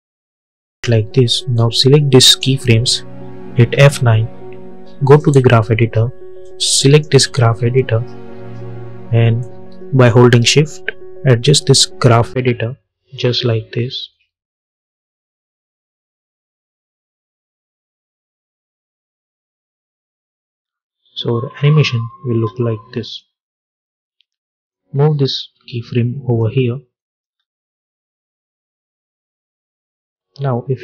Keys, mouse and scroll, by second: 1.4-3.6 drag, 3.6 F9, 5.0 click, 7.4 scroll up 1, 9.3-14.0 drag, 14.3-19.6 shift+drag, 20.4 space, 22.9-26.8 drag, 27.1 space, 29.2-30.8 drag.